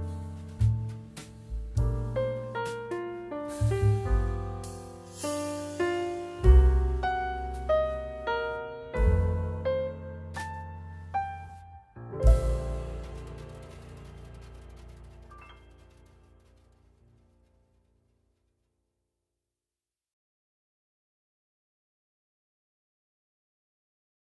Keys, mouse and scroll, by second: 11.3 typing.